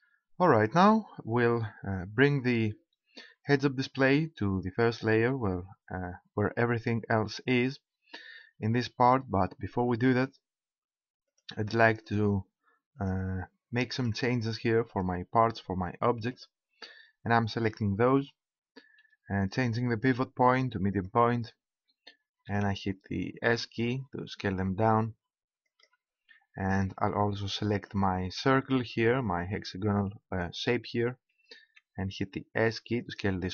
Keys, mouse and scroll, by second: 11.2-18.1 right drag, 19.4-21.3 drag, 22.3 s, 25.8-27.6 drag, 28.9 right click, 31.6 s, 33.1-33.5 drag.